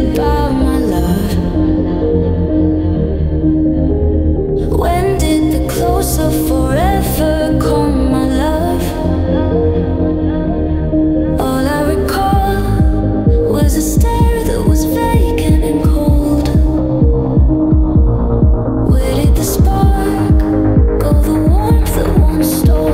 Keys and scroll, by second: 4.3 ctrl+g, 13.4 ctrl+g, 14.4 space.